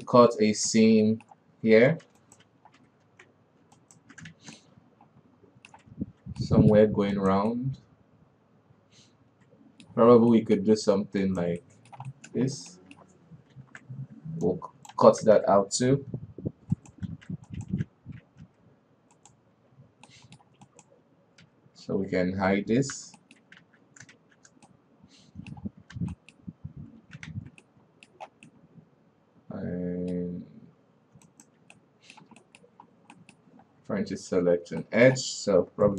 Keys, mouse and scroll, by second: 2.1 alt+KP_3, 2.7 alt+right click, 3.5 alt+KP_2, 4.2 alt+right click, 4.8 shift+z, 5.0-7.6 middle drag, 7.6 alt+right click, 8.0-10.5 middle drag, 10.5 scroll up 1, 10.8-11.6 middle drag, 11.6 alt+right click, 12.1-12.9 middle drag, 12.9 scroll up 1, 13.2-14.0 middle drag, 14.0 ctrl+e, 15.7 alt+a, 16.6 l, 16.7 k, 17.5 alt+KP_3, 17.9 right click, 18.2 alt+a, 18.9 l, 19.6 right click, 20.0 l, 20.5-21.1 middle drag, 21.1 right click, 21.9 l, 23.4 h, 23.6 middle click, 24.1 alt+a, 24.6 shift+z, 25.1-26.4 middle drag, 26.4 alt+a, 26.6 middle click, 26.9-27.4 scroll up 2, 27.8 alt+KP_2, 28.1-31.8 middle drag, 31.8 alt+right click, 32.2-33.3 middle drag, 33.3-33.6 scroll up 1, 33.6 middle click, 33.9-34.6 scroll up 3, 35.3 middle click.